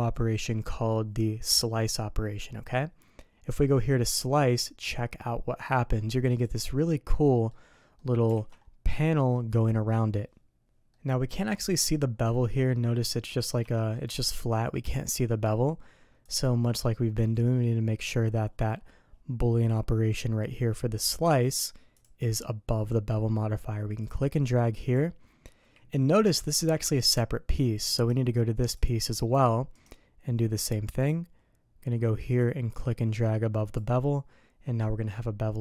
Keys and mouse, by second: 7.1-7.5 drag, 8.0 click, 8.3 alt+a, 10.9 middle click, 13.7 shift+middle click, 16.3 click, 22.0 click, 24.0 click, 26.6 g, 28.8 click, 29.4 g, 31.1 click, 32.4-33.8 drag.